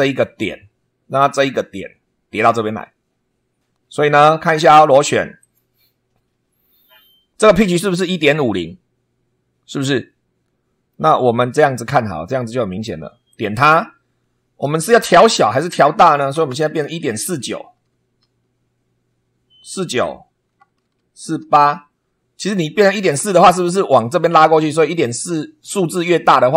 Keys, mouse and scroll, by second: 5.4 click, 10.9-11.9 drag, 13.3 click, 14.9 Right, 16.2 BackSpace, 17.7 4, 18.2 9, 20.4 BackSpace, 21.4 8, 23.0 BackSpace.